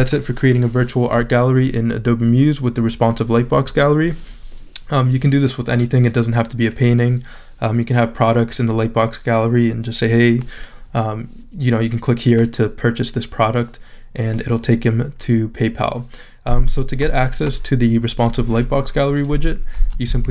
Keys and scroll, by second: 19.8-20.3 typing.